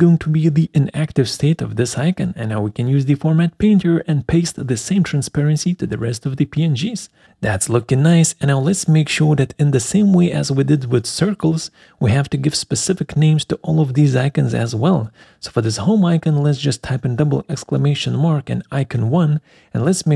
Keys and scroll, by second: 10.8 Escape, 17.2-19.6 typing.